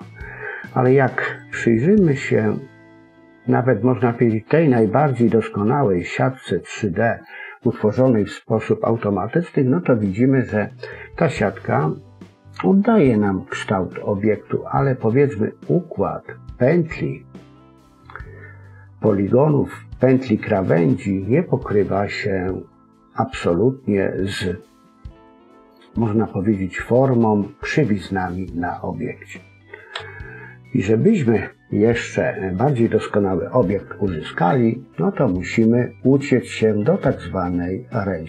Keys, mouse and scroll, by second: 0.8-1.3 scroll down 2, 1.3 middle click, 2.2 scroll up 2, 2.4 middle click, 9.6-10.2 scroll up 1, 10.2-12.6 scroll down 1, 22.6 middle click, 25.9-26.4 scroll up 1, 26.4-27.8 scroll down 1, 27.8-28.5 scroll down 4, 28.1 middle click, 29.2-29.9 scroll up 1, 29.9 KP_1, 30.6-31.2 scroll up 2, 35.6-36.4 scroll down 2, 36.4-37.7 scroll up 1, 37.7-38.2 scroll down 2.